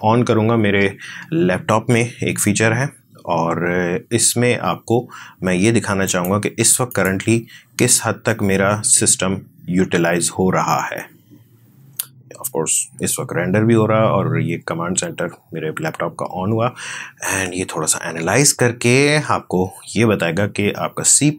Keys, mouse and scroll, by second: 6.7 click, 7.6 click.